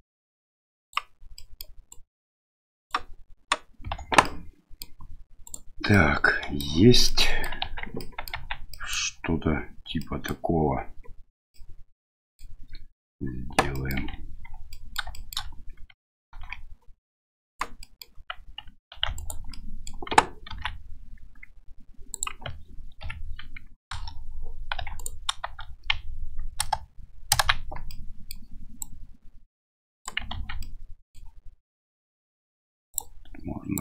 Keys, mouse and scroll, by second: 1.4 middle click, 1.9-2.9 right drag, 4.0 Tab, 4.2-4.8 middle drag, 5.4 right click, 5.9 middle click, 7.0 middle click, 7.6 Tab, 8.0 middle click, 8.3 Tab, 8.7 middle drag, 10.0 middle click, 11.5-12.4 middle drag, 13.7 middle click, 14.0 Tab, 14.7 middle click, 15.1 middle click, 16.3 ctrl+r, 17.8 middle click, 18.9 2, 19.1 alt+right click, 19.5 middle click, 20.5 ctrl+b, 24.8 1, 24.9 right click, 26.6 KP_1, 27.9 middle click, 28.8-30.0 drag, 30.3 ctrl+z, 30.6 middle click, 32.9-33.8 drag.